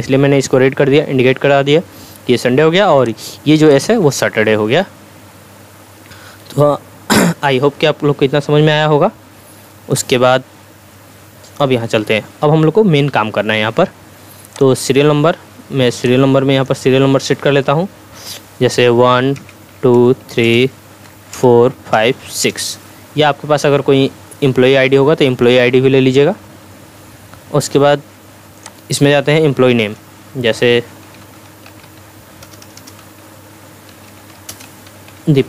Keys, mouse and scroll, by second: 3.0 click, 9.9-11.8 drag, 28.6 click, 31.0-35.4 typing.